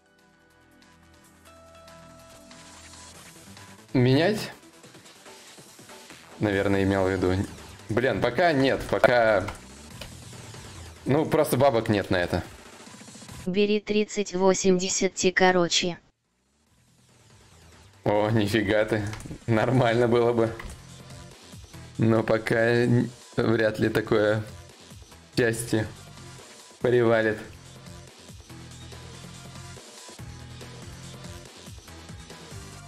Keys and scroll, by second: 31.3 shift+e, 32.5 s.